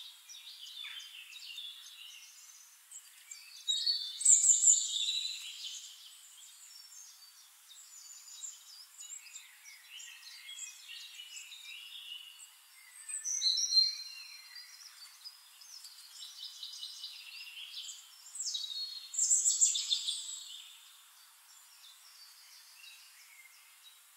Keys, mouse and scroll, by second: 0.2 ctrl+d, 0.5 ctrl+click, 1.7 t, 1.9 click, 2.4 ctrl+a, 3.9 Caps_Lock, 5.7-10.3 typing, 10.4 ctrl+a, 11.1 click, 11.5 ctrl+a, 12.1-13.9 typing, 14.6 click, 16.0 ctrl+click, 16.2 ctrl+a, 16.5-17.4 typing, 17.8 click, 18.6 click, 18.9 ctrl+a, 19.7 KP_1, 19.9 KP_0, 20.1 Return, 21.6 ctrl+click, 21.9 ctrl+a, 22.5 KP_5, 22.7 Return, 23.9 click.